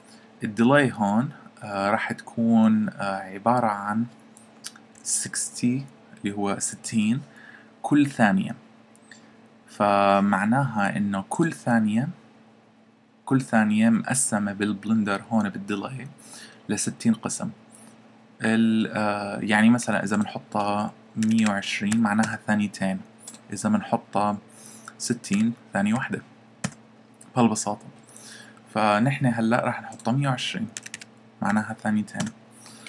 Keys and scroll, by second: 4.7-5.7 typing, 21.0-21.9 typing, 25.3-25.9 typing, 30.5-31.5 typing.